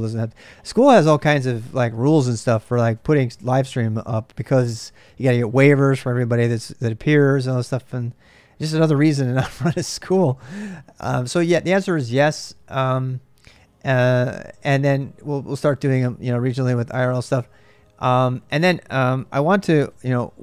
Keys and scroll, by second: 19.2-20.4 typing.